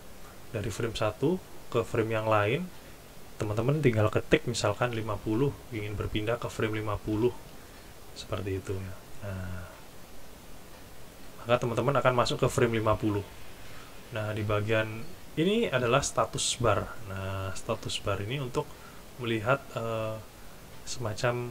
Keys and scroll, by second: 1.0 typing, 5.0 typing.